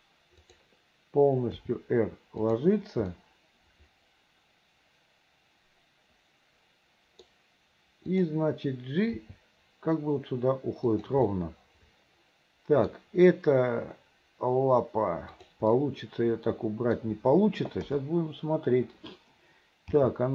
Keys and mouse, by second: 0.5 click, 1.7 r, 3.3-7.4 middle drag, 9.2 g, 11.5-13.0 middle drag, 15.9-17.1 middle drag, 17.9 KP_7, 20.1 g.